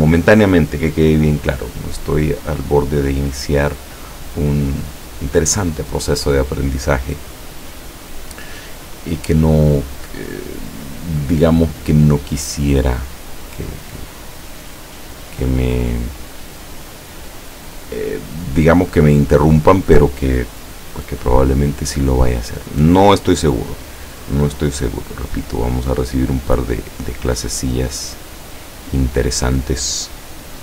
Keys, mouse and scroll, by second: 11.7 click, 16.6 click, 25.9 click, 27.2-28.8 drag.